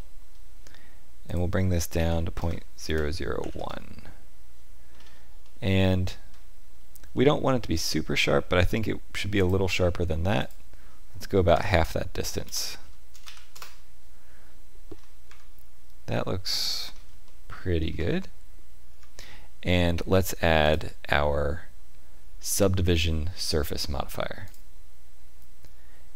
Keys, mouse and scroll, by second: 1.2 click, 4.9-5.4 scroll up 3, 5.4 shift+middle click, 5.8 middle click, 7.1 shift+middle click, 9.3 click, 14.8-15.3 scroll down 3, 15.2 Tab, 16.8 scroll down 2, 17.2 shift+middle click, 17.8-18.2 scroll down 2, 18.8 Tab, 20.6 click.